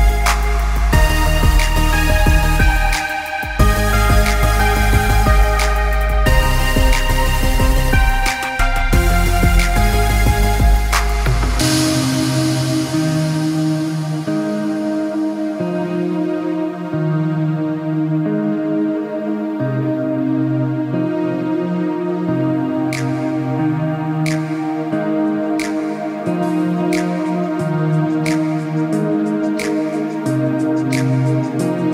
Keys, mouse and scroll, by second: 0.2 KP_1, 0.3 KP_5, 0.4 KP_0, 0.6 KP_Enter, 1.5 click, 4.5 click, 5.1 Down, 5.7 click, 7.2 alt+Num_Lock, 7.3 alt+scroll down 1, 8.8 space, 8.9 click, 9.0 space, 10.1 click, 11.4 alt+scroll down 1, 12.2 click, 13.7 click, 15.2 right click, 16.1 click, 19.4 click, 23.5 right click, 25.2 click, 27.0 click.